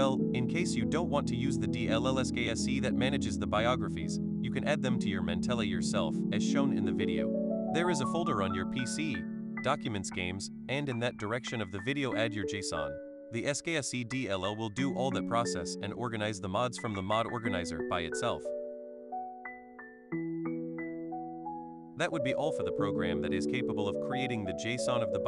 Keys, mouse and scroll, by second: 6.3 click, 11.0 click, 13.5-14.6 drag, 15.1 click, 24.1 click.